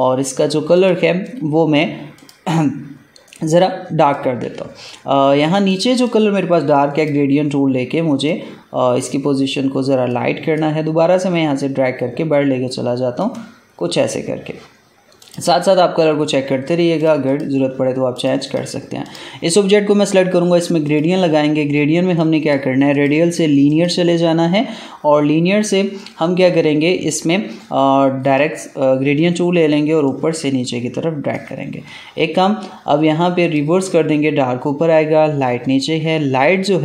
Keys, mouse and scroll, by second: 4.8 alt+scroll down 1, 5.3 space, 5.3-22.9 drag, 28.1-33.3 drag, 36.5 click.